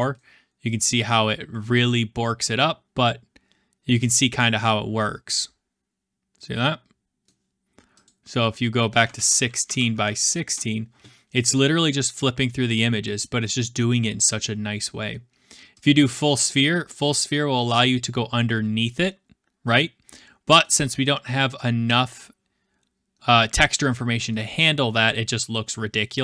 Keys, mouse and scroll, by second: 8.0 click, 8.8-10.5 typing, 14.3-15.5 middle drag, 15.8-17.4 drag, 20.6-26.2 middle drag, 20.6-21.8 scroll.